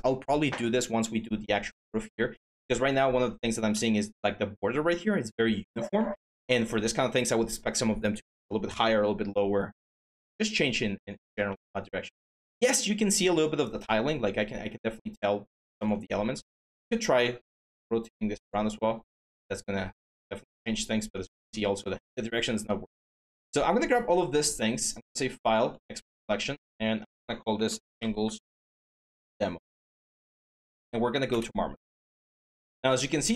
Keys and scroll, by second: 16.0 e, 21.1 ctrl+z, 27.3 Caps_Lock, 27.4-29.3 typing.